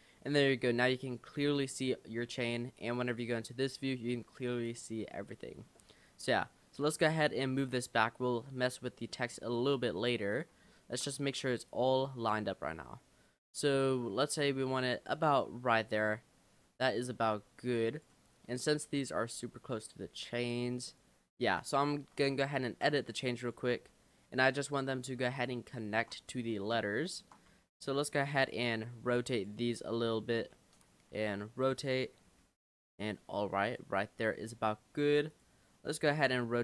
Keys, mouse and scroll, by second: 0.5 scroll down 4, 0.6-1.2 middle drag, 1.2-1.7 scroll up 5, 1.7 middle click, 2.2-3.0 scroll down 1, 3.1 click, 3.8-4.1 scroll down 2, 4.1-4.7 scroll up 4, 4.7 click, 5.2-5.8 middle drag, 5.8 scroll down 2, 6.8 click, 8.3 scroll up 2, 8.7 middle drag, 9.0 scroll up 1, 9.2-10.3 middle drag, 10.3 click, 10.7 shift+middle drag, 10.9-11.6 scroll up 1, 11.7 click, 14.4 click, 15.4-16.9 middle drag, 16.9 click, 18.3 middle click, 19.6-21.6 middle drag, 21.6 click, 22.1 Tab, 22.6 shift+middle click, 22.8 shift+scroll up 1, 23.4 click, 23.8 l, 25.4 click, 25.8 shift+middle click, 26.3-26.6 scroll up 3, 26.6 middle click, 27.6 r, 29.0 g, 30.4 l, 31.2 r, 33.0 g, 33.7 click, 35.0 l, 35.3 click, 36.3 r.